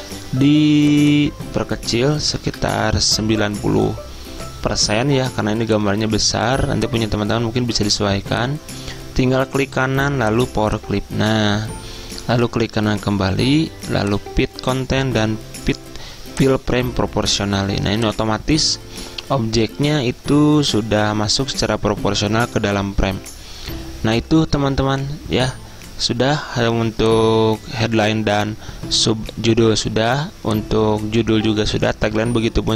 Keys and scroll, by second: 2.1-4.5 typing.